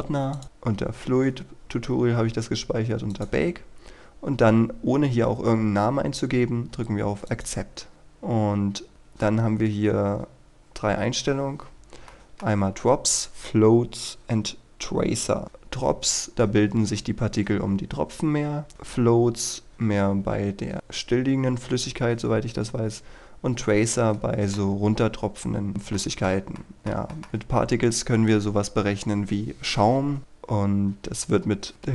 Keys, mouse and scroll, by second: 23.7 scroll up 1, 24.0 middle click, 26.0 shift+middle click, 27.2 shift+middle click, 30.2-31.3 scroll down 1, 31.3-31.9 scroll up 1.